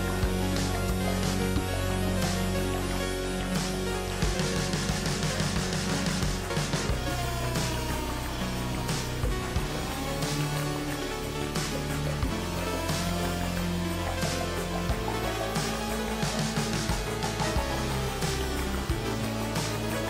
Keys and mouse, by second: 1.2 click, 6.8 click, 7.6 g, 10.9 h, 12.0 ctrl+z, 12.5 g, 14.6 click, 15.3 g, 18.0 KP_Decimal.